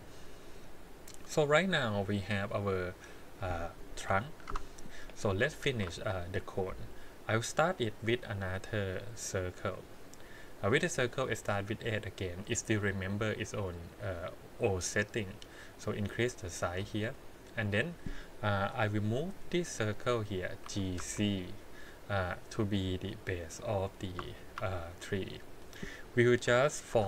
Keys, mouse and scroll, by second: 0.3 click, 1.3-3.4 middle drag, 4.0 KP_1, 4.5 Tab, 5.6 shift+a, 13.4 middle click, 14.7-16.8 drag, 17.7 click, 18.6 KP_1, 20.6 g, 24.3 shift+middle drag, 24.7-25.8 middle drag, 26.4 KP_1.